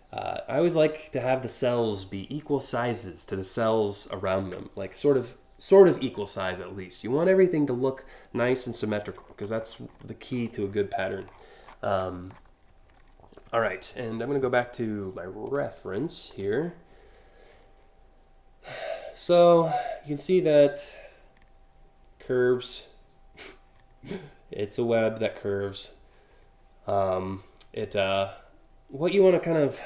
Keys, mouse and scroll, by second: 8.8-9.6 scroll up 5, 10.0-10.5 scroll up 2, 10.9 scroll down 6, 11.0-12.7 typing, 15.1 click, 15.9 click.